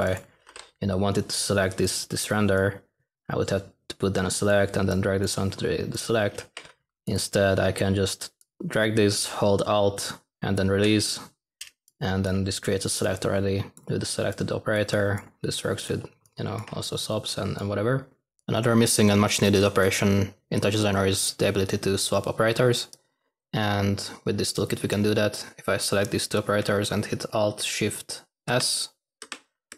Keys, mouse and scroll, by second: 0.1-0.9 typing, 6.2-6.9 typing, 28.4 typing.